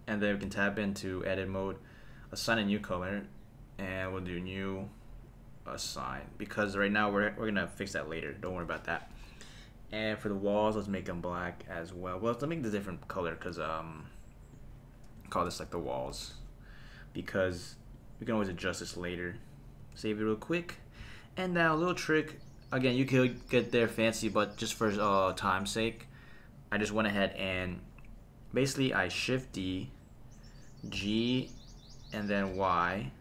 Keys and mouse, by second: 0.4 Tab, 2.5 click, 4.2 click, 5.8 click, 6.6 Tab, 8.5 super+s, 9.9 click, 11.5 click, 12.6 click, 14.5-16.2 drag, 15.9 l, 17.1 click, 19.4 click, 20.0 super+s, 23.7 click, 29.4 shift+d, 30.9 g, 32.5 y.